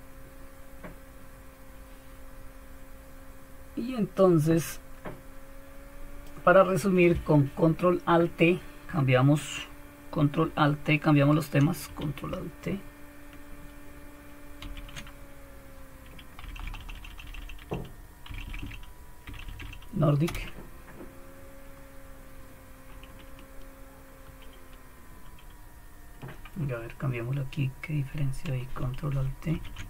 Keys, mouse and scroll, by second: 2.0-2.8 scroll up 1, 2.8-4.3 scroll up 1, 4.3 scroll up 1, 4.6-6.3 drag, 7.3-14.1 drag, 14.6 ctrl+alt+t, 16.4 End, 16.6 Down, 16.8 Down, 16.9 Down, 17.2 Down, 17.4 Down, 18.5 Down, 19.3 Down, 19.5 Down, 19.6 Down, 20.3 Return, 24.2 super+2, 25.2 super+3, 29.5 ctrl+alt+t.